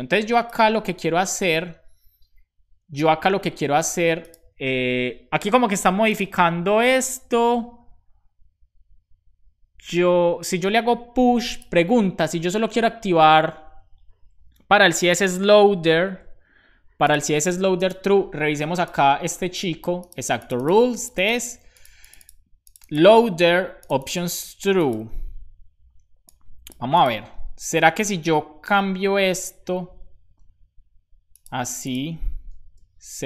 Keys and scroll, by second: 1.0 BackSpace, 2.7 BackSpace, 3.3 super+s, 32.7 BackSpace.